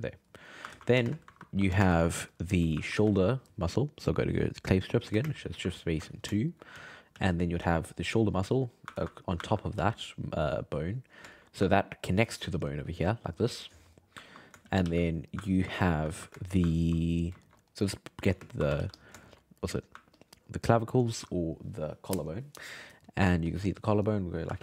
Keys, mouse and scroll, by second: 0.4 middle click, 0.7 ctrl+z, 1.1 shift+space, 1.8 shift+space, 2.1 f, 2.8-4.4 ctrl+middle drag, 4.4 click, 5.2 shift+space, 6.5 shift+middle click, 6.7 f, 7.1 f, 7.6 f, 8.0 click, 9.0 ctrl+x, 9.4 ctrl+middle click, 9.7 f, 10.4 click, 11.3-12.3 shift+middle drag, 12.3-13.9 drag, 13.9 ctrl+middle click, 14.6 shift+c, 14.8 f, 15.1-18.4 ctrl+middle drag, 18.4 shift+space, 18.8 f, 19.2 shift+middle click, 20.2-23.2 ctrl+drag, 23.5-24.5 ctrl+drag, 24.5 f.